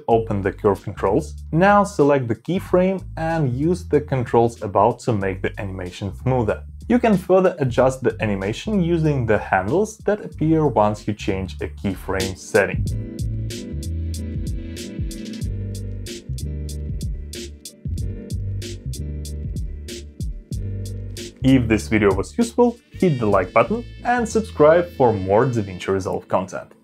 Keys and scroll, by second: 8.7 space, 18.4 space, 21.8 space.